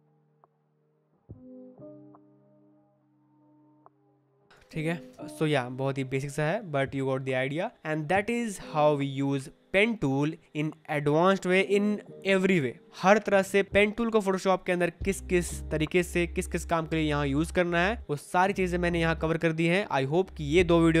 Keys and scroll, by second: 3.3 Return, 3.5 Escape, 4.6 space.